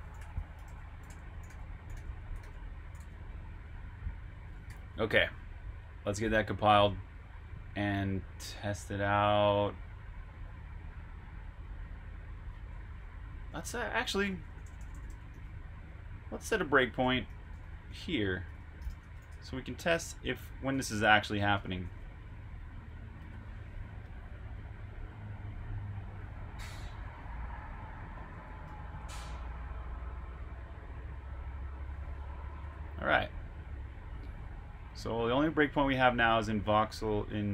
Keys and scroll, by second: 4.4-5.7 typing, 5.8 super+h, 13.0 Escape, 13.4-20.7 typing, 23.1-24.3 typing, 28.5 super+\, 29.0-31.1 typing.